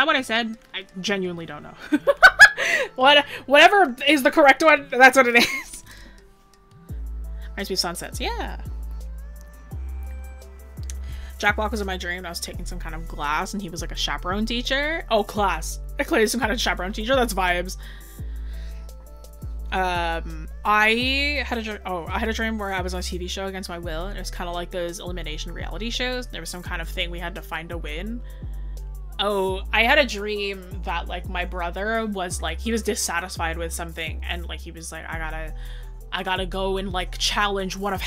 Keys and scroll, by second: 1.9 scroll down 1.